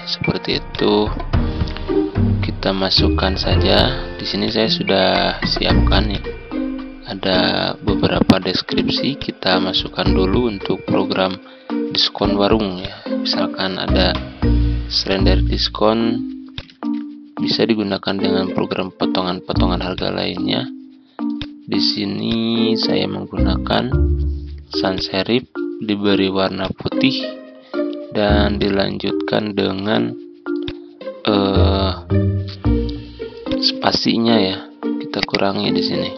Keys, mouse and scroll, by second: 12.0 ctrl+x, 12.7 click, 16.5 click, 16.8 ctrl+a, 19.9-29.8 drag, 30.6 click, 33.5-36.1 drag.